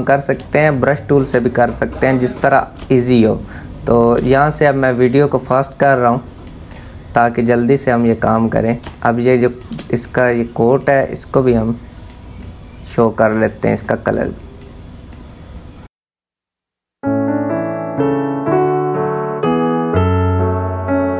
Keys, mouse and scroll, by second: 1.6 click, 2.4 space, 2.6 click, 2.9 space, 4.2-7.9 drag, 8.5 space, 8.5 click, 9.0 space, 9.6-15.7 drag, 15.7 space, 15.9 click, 15.9 space, 16.1 click, 16.8 space, 16.9 click, 17.9 ctrl+alt+z, 18.3-19.4 drag, 19.6 space, 19.9 click, 20.3 space, 20.4 click, 20.4 space, 20.6 click, 21.1 space.